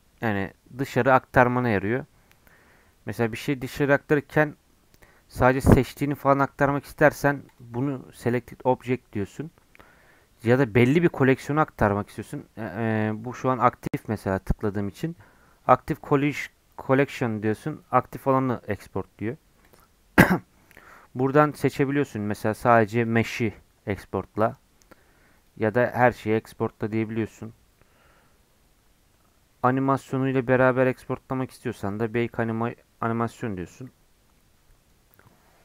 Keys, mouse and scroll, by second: 13.0-16.0 drag.